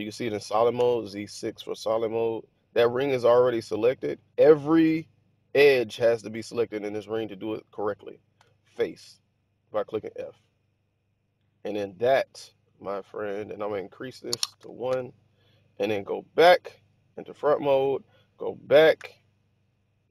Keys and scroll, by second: 0.7 6, 8.3 f, 14.5 1, 14.8 Return, 16.4 1, 18.9 Tab.